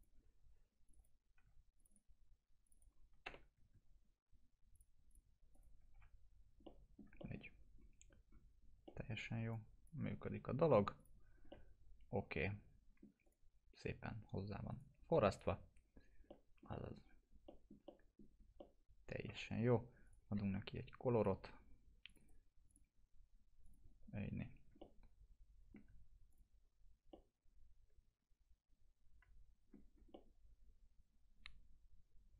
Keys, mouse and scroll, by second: 3.2 ctrl+BackSpace, 4.7 click, 5.9 F4, 6.2 scroll down 2, 6.6-7.4 alt+middle click, 7.3-8.8 scroll down 2, 8.8 middle click, 9.5-10.1 drag, 11.5-13.0 alt+middle drag, 13.2 click, 14.7 right click, 15.3 click, 15.7 scroll down 1, 16.2-17.0 alt+middle click, 16.9 scroll down 1, 17.4 alt+middle click, 17.9 middle click, 18.3 scroll down 1, 18.6-19.5 alt+middle click, 19.5 scroll up 1, 20.0 click, 22.2 right click, 22.7 click, 24.3 scroll down 1, 24.8-25.9 alt+middle click, 25.3 alt+middle click, 26.3 click, 27.1-29.9 alt+middle drag, 29.8 scroll down 1, 30.1-32.3 alt+middle drag.